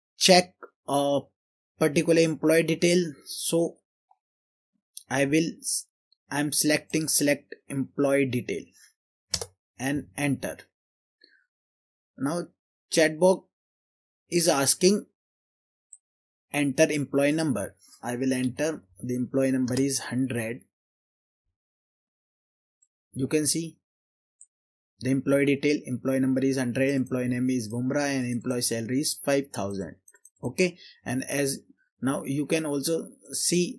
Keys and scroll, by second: 9.4 Return, 18.5-19.0 typing, 19.7 Return.